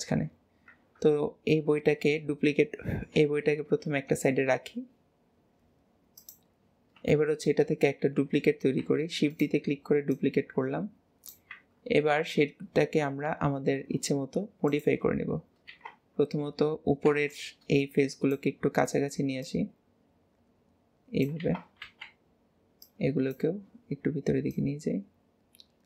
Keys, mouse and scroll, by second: 0.9 KP_1, 6.6-7.1 scroll up 1, 7.1 shift+middle click, 7.7-8.3 scroll up 1, 8.3-8.9 scroll up 1, 8.9 shift+d, 10.1 click, 12.1 alt+z, 14.7 click, 15.3-15.7 scroll up 2, 15.7 alt+a, 19.4 click, 21.4 alt+a, 24.5 click.